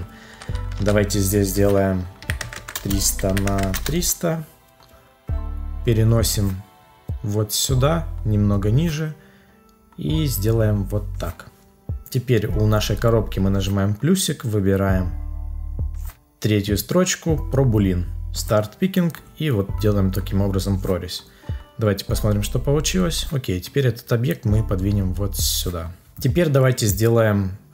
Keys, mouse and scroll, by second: 0.7 ctrl+a, 2.7 Return, 3.7 Return.